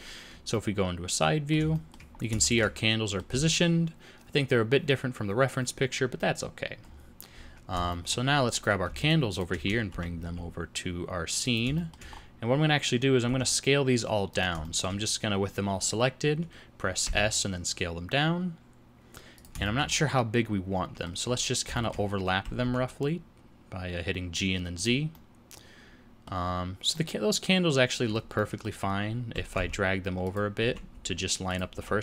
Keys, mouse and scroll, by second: 0.5 middle click, 1.7 shift+middle click, 2.1 scroll up 2, 2.4 shift+middle click, 2.7 middle click, 6.9-7.9 scroll down 7, 7.9 shift+middle click, 8.5 click, 9.0 shift+click, 9.3 shift+click, 9.9 g, 11.8 shift+middle click, 12.1-12.9 scroll up 2, 13.3 s, 14.6 shift+middle click, 17.0 s, 19.6 shift+middle click, 19.9 middle click, 21.3-21.7 scroll up 3, 21.7 shift+middle click, 22.4 g, 25.1 middle click, 26.5 scroll up 2, 26.9 middle click, 28.4 middle click, 29.3 g, 30.6 g, 31.7 g.